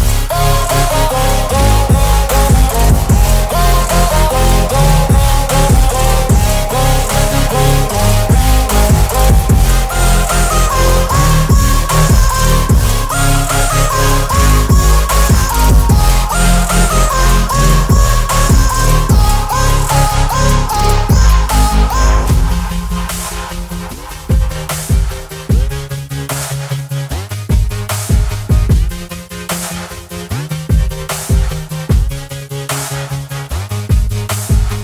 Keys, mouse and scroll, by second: 5.4 scroll up 1, 5.5 click, 6.4 space, 7.8 ctrl+a, 9.2 click, 9.6-10.4 scroll down 1, 11.0-11.5 scroll up 1, 13.1 click, 15.6 BackSpace, 16.3 click, 18.9 ctrl+j, 20.1 ctrl+t, 22.4 click, 23.0-26.2 alt+drag, 31.2 click, 33.2 ctrl+t.